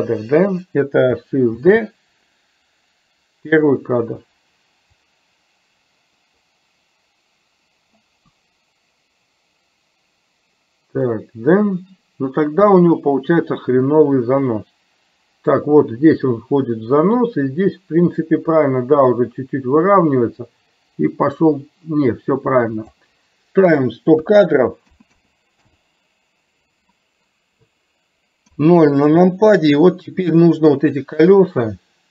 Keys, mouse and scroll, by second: 1.6 shift+d, 5.0-23.1 drag, 23.7-25.8 drag, 25.1 KP_0, 28.6 KP_0.